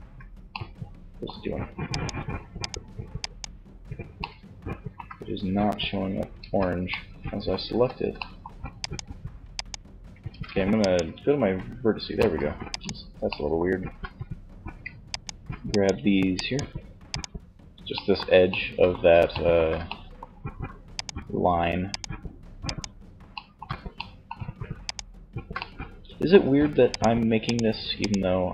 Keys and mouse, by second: 5.4 z, 6.8 z, 7.9-11.3 middle drag, 9.3 ctrl+Tab, 11.6-12.6 middle drag, 20.0-21.3 middle drag, 22.5-23.5 middle drag, 23.9-25.5 middle drag.